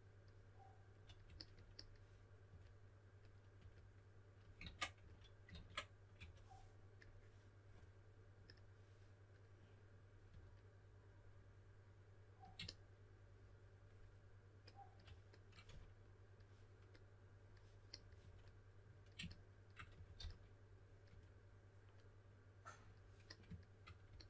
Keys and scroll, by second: 2.5-5.0 typing, 4.6 super+z, 5.5 super+z, 6.1 3, 10.3 typing, 15.7 4, 17.9-21.1 typing.